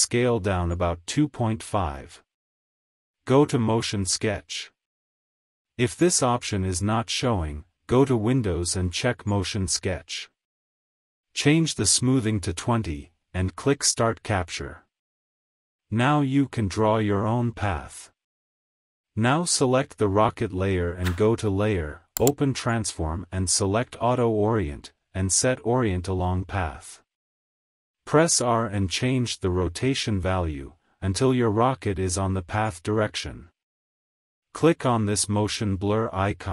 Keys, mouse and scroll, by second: 3.6 click, 6.0 click, 9.6 click, 14.0-17.6 drag, 19.3 r, 21.1 click, 26.0-33.6 drag, 34.4-36.2 drag.